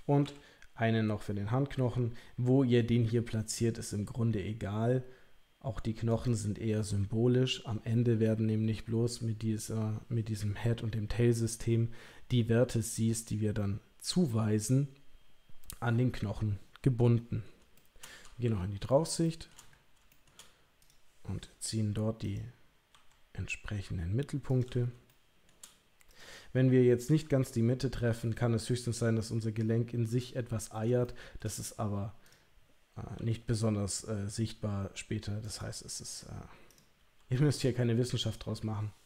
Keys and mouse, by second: 0.2 e, 17.7 shift+middle click, 18.4 KP_7, 19.2 shift+middle click, 22.2 click, 22.9 g, 25.1 shift+click, 26.1 click, 27.1 g, 31.0 shift+middle click, 32.2 click, 33.1 g, 37.0 g.